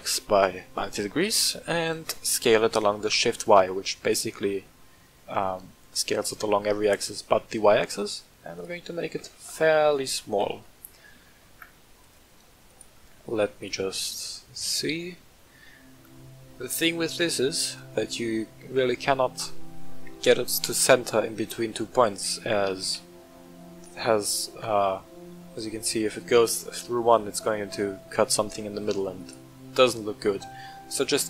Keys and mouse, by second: 2.1 s, 2.5 shift+y, 8.5 click, 9.0 s, 9.3 shift+y, 9.9 click, 10.3 g, 10.5 z, 12.0 click, 12.6 click, 13.0-17.7 middle drag, 18.9-19.7 middle drag, 22.6 r, 22.8 z, 29.1 right click, 30.2-30.6 middle drag.